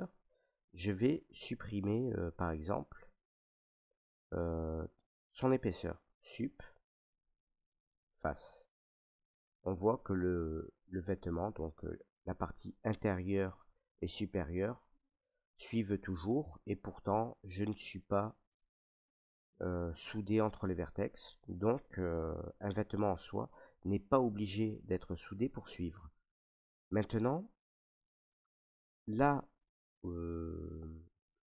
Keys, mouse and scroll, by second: 0.9 middle click, 0.9-1.6 scroll, 1.1-2.0 drag, 2.0 scroll down 2, 2.4 alt+right click, 2.8 scroll, 4.3-5.0 scroll down 7, 4.3 middle click, 5.9 middle click, 6.8 Delete, 8.0 click, 9.2 middle click, 9.4 middle click, 9.5 middle click, 9.5 middle click, 9.9 middle click, 10.0 middle click, 10.9 middle click, 11.1 middle click, 13.5 middle click, 14.6 middle click, 15.7 right click, 21.1 click, 21.7 click, 22.8 shift+scroll, 23.5 shift+middle click, 24.7 shift+middle click, 26.5 middle click, 27.3 shift+middle click, 28.2 middle click, 28.6 middle click, 29.9 middle click, 30.6 Tab, 30.9-31.3 scroll.